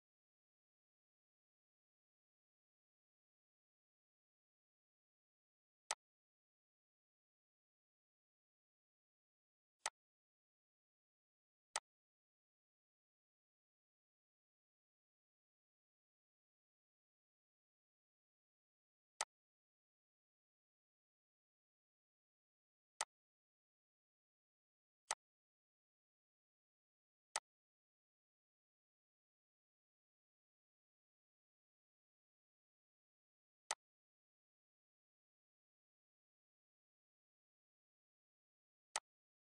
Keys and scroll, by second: 10.4 ctrl+d, 33.6 ctrl+d.